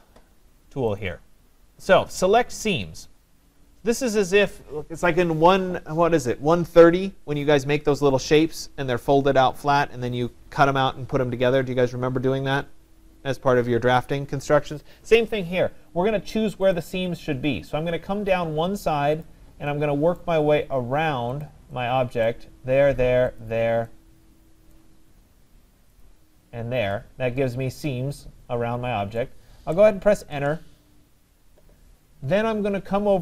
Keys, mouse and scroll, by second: 1.0 click, 16.8 click, 19.2 click, 20.2 right click, 21.4 click, 22.3 right click, 22.3 click, 23.4 click, 24.8 right click, 26.1 click, 29.2 right click, 30.3 Return.